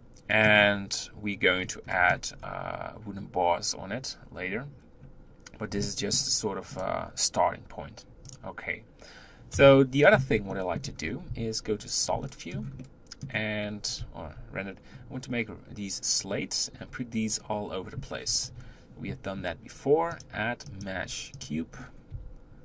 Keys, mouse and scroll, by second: 1.5-2.0 scroll up 3, 2.0 middle click, 2.4-5.9 scroll down 3, 5.9-6.8 middle drag, 6.8-8.4 drag, 9.5 KP_1, 10.6-11.0 shift+middle drag, 11.0 scroll up 2, 11.3 z, 12.3-13.6 shift+middle drag, 13.6-14.4 scroll up 2, 14.8-16.8 scroll up 1, 16.8-18.5 scroll down 1, 18.5 KP_1, 21.5 drag, 21.8-22.1 scroll down 5, 22.1 g.